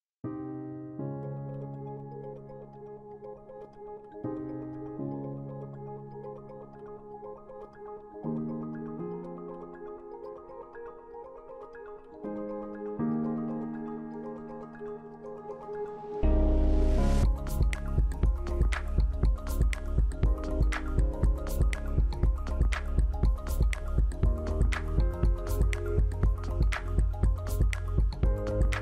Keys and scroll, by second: 25.3 BackSpace.